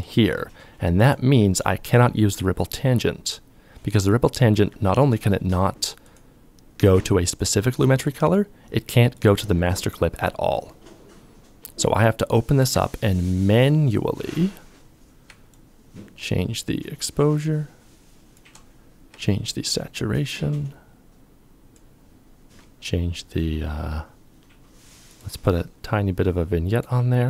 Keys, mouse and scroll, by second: 14.7 ctrl+click, 18.8 ctrl+click, 27.0 KP_Subtract.